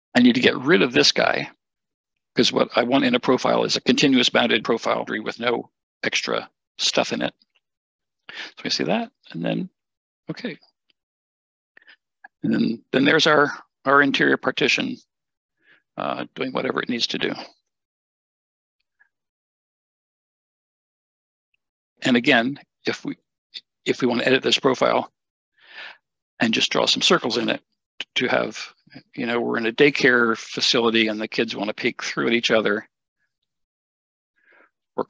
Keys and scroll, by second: 6.5 Delete, 14.3 Escape.